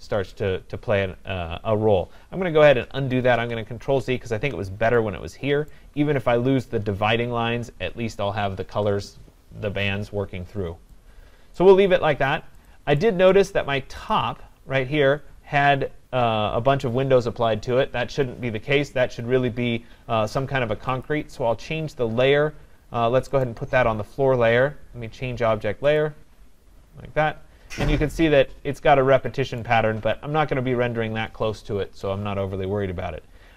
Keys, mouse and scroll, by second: 0.9-2.4 scroll, 3.4 ctrl+z, 3.8 ctrl+z, 5.7 right click, 9.9 right click, 10.2-10.7 scroll, 11.6 right click, 12.2 scroll, 12.7 click, 13.3 right click, 14.1 click, 15.3 click, 15.3-16.6 scroll, 19.6 middle click, 21.1 click, 23.4 right click, 26.0 click, 27.4 scroll, 29.6 right click, 30.1-30.5 scroll, 33.2 scroll.